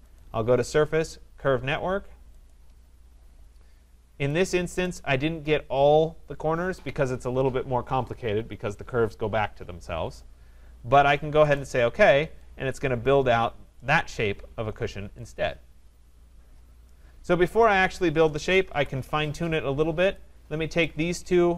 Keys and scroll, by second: 18.7 Delete.